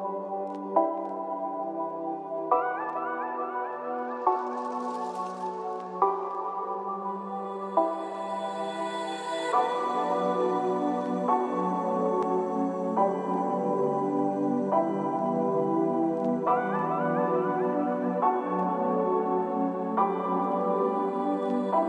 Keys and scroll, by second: 4.7 ctrl+=.